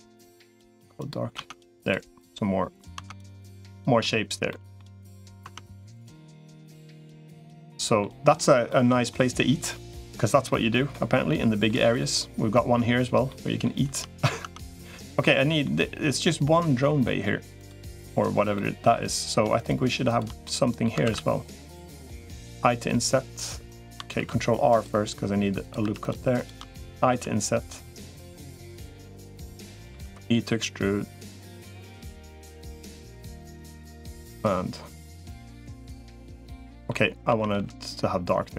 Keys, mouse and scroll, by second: 0.3 g, 1.3 Tab, 2.7 Tab, 3.2 middle click, 3.5 click, 3.7 middle click, 4.3 middle click, 5.3 Tab, 6.0-7.0 middle drag, 7.1 middle click, 8.5 middle click, 10.5 middle click, 11.1 middle click, 13.1 middle click, 14.3 Tab, 15.0 middle click, 17.7 middle click, 18.3 middle click, 19.9 shift+click, 20.3 middle click, 20.9 ctrl+s, 22.3 i, 23.9 ctrl+r, 25.7 3, 26.1 shift+click, 26.9 i, 28.9 middle click, 29.7 e, 32.2 middle click, 33.1-34.3 drag, 35.6-36.7 middle drag, 37.1 a, 37.5 g.